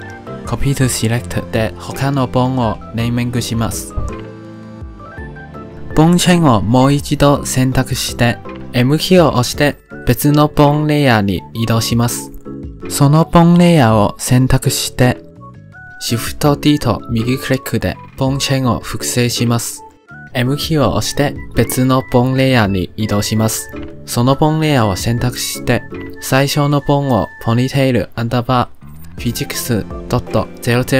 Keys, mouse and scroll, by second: 2.2 click, 2.9 click, 3.6 click, 4.1 click, 4.6 click, 5.1 click, 5.7 click, 7.8 click, 8.2 l, 9.0 m, 13.5 click, 14.5 click, 16.7 shift+d, 20.5 m, 24.2 click, 25.6 click, 26.7 click, 27.4-30.6 drag.